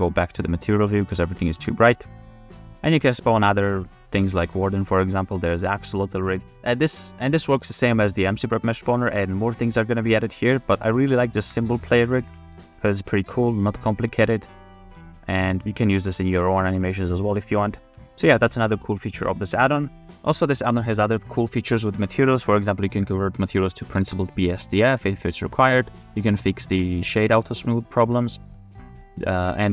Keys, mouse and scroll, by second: 0.5 middle drag, 1.0 shift+middle click, 1.3 middle click, 1.6-3.2 middle drag, 1.6 g, 3.2-4.1 drag, 4.6 drag, 5.6 middle click, 5.8 g, 6.6 g, 7.7 middle click, 8.6 g, 11.0 click, 11.5 f, 11.9 middle click, 12.3 ctrl+Tab, 13.6 click, 14.0 r, 16.7 g, 18.0 ctrl+Tab.